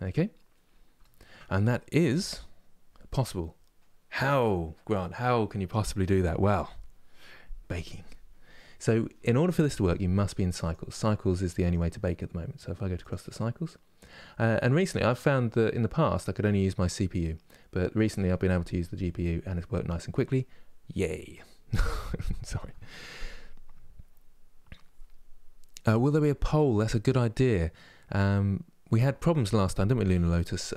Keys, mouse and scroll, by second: 0.3-0.7 scroll down 1, 0.7-8.1 shift+middle drag, 12.8-19.3 drag, 19.3-30.7 middle drag.